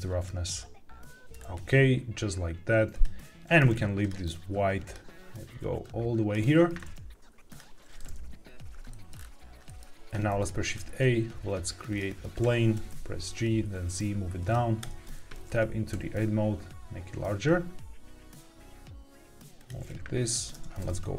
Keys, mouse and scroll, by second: 0.2-1.2 drag, 1.2 g, 1.3 scroll down 2, 2.8 click, 3.9 click, 4.8 click, 7.4 click, 9.0 middle click, 9.1-9.6 scroll down 2, 9.6 middle click, 10.2 shift+a, 12.7 g, 12.8 z, 14.3 click, 14.7 Tab, 15.4 scroll down 2, 15.8 s, 19.5 click, 20.4 Tab, 20.7 g, 20.8 z.